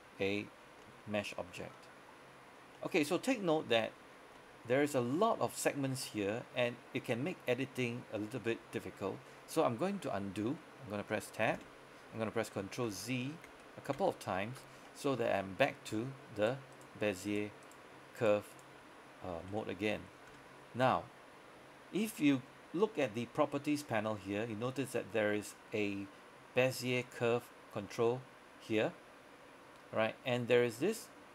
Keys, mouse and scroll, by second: 0.7 scroll down 1, 0.9 middle click, 1.6 scroll up 1, 1.8 middle click, 3.6 scroll down 1, 3.8 middle click, 4.2 scroll up 1, 4.5 middle click, 8.1 scroll down 1, 8.2 middle click, 11.7 Tab, 12.9 ctrl+z, 13.6 ctrl+z, 14.0 ctrl+z, 15.0 middle click, 16.0 Tab, 16.5 right click, 19.5 Tab, 20.0 middle click, 20.4 Tab, 27.1 click.